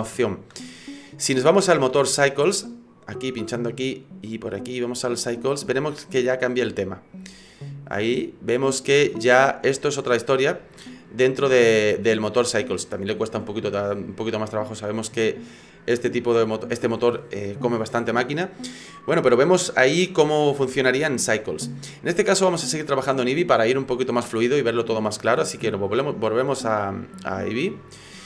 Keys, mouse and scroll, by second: 3.1 click, 4.3 click, 10.0 scroll up 2, 10.8 shift+middle click, 26.1 click.